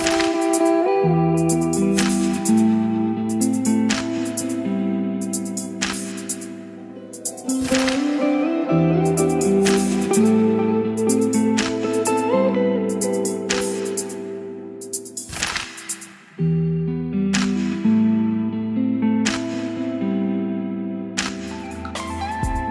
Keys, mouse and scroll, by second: 8.2-9.8 middle drag, 9.8-11.9 drag, 11.6-12.8 typing, 14.3-22.7 drag, 22.6-22.7 typing.